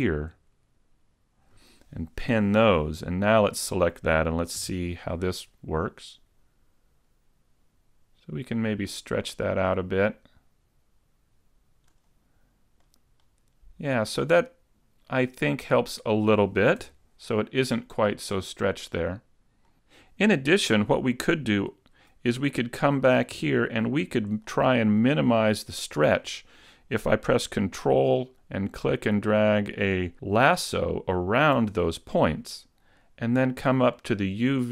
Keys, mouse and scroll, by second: 2.2 p, 3.4 right click, 4.6 g, 12.1 click, 12.9 middle click, 15.7-16.0 scroll down 1, 16.2 middle click, 16.9 Tab, 17.4 middle click.